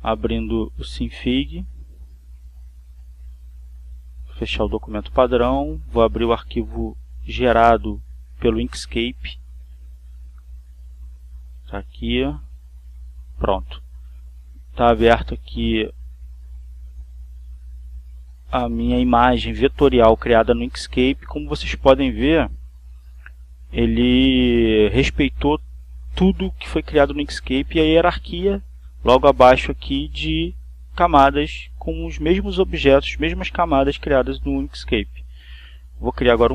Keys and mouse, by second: 1.2 click, 4.8 click, 5.9 click, 7.1 click, 8.9 click, 10.1 click, 11.3 click, 13.2 click, 15.1-16.8 drag, 18.3-19.9 drag, 25.2-27.6 drag, 35.3 click.